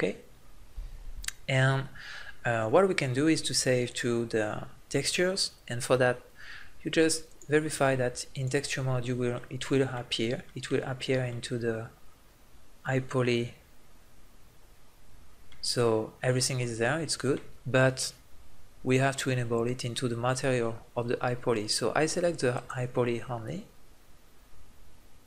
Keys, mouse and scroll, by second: 7.2 click, 8.0 click, 8.5 click, 9.4 middle click, 11.5 middle click, 13.3 middle click, 15.9 middle click, 16.3-17.6 drag, 17.7-18.9 middle drag, 18.9-20.7 drag, 20.7-25.2 middle drag.